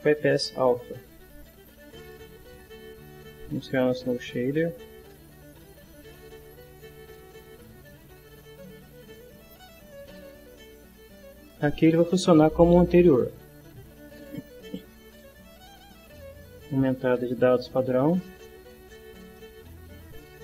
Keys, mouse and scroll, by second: 1.1 click, 2.4-3.7 drag, 4.1 click, 5.4 click, 6.4 click, 7.3 click, 9.0-10.0 drag, 13.1 right click, 15.1 click, 16.5-17.6 drag, 17.7 click, 19.5-20.4 ctrl+middle drag.